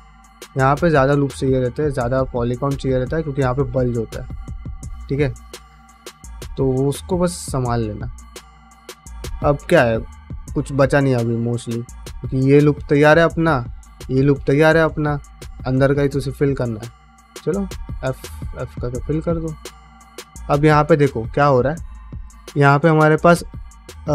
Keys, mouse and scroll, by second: 0.7 ctrl+middle click, 1.0 middle click, 1.4 click, 1.5-5.2 typing, 2.1 click, 2.6 middle click, 3.0 click, 3.6 click, 4.1 middle click, 4.5 click, 5.1 click, 5.5 middle click, 5.8 shift+middle click, 6.1 middle click, 6.6 middle click, 7.1 middle click, 7.8 middle click, 8.7 shift+middle click, 9.0-11.0 middle drag, 11.8 3, 12.1 alt+click, 12.5 middle click, 13.8 alt+shift+click, 14.1-15.3 middle drag, 15.8 middle click, 16.7 1, 17.1 click, 17.5 f, 18.2 2, 18.4 click, 18.5 f, 18.8 middle click, 19.7 middle click, 20.8 middle click, 21.3 shift+middle click, 21.7 middle click, 22.1 3, 22.5 alt+click, 23.8 1.